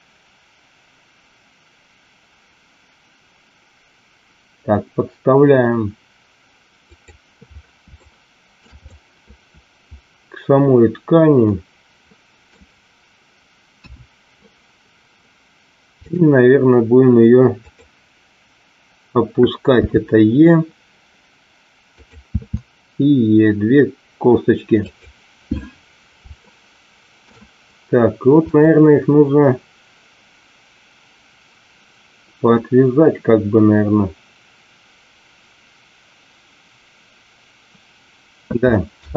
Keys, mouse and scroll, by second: 6.9 click, 8.1 shift+middle click, 8.8-12.5 middle drag, 13.8 KP_1, 15.9 click, 19.9 e, 21.9 click, 22.3 e, 24.8 click, 26.4 shift+middle click, 28.4 click.